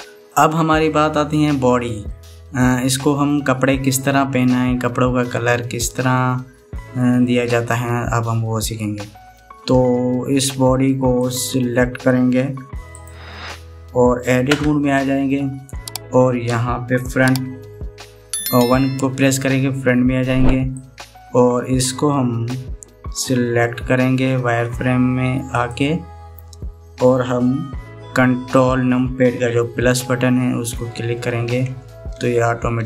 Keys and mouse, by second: 0.5 middle click, 1.6 middle click, 2.7-5.6 middle drag, 11.9 click, 13.1 Tab, 15.4 Tab, 17.8 KP_1, 21.7-23.2 drag, 26.2 click, 31.5 ctrl+KP_Add, 31.9 ctrl+KP_Add, 32.4 ctrl+KP_Add, 32.6 ctrl+KP_Add.